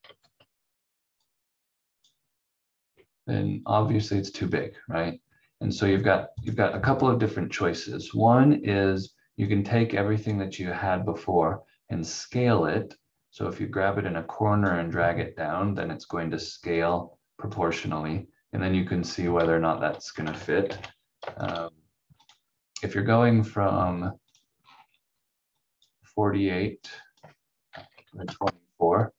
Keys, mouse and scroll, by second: 0.2 shift+Page_Down, 1.2 click, 4.4-5.2 scroll up 1, 5.2-6.4 scroll down 1, 6.4 click, 15.6 scroll up 1, 16.8 click, 17.8-18.8 scroll down 1, 20.6 ctrl+g, 21.4 shift+click, 21.6 c, 22.2 click, 24.6-25.0 scroll down 1, 25.8 click, 27.4-28.7 typing.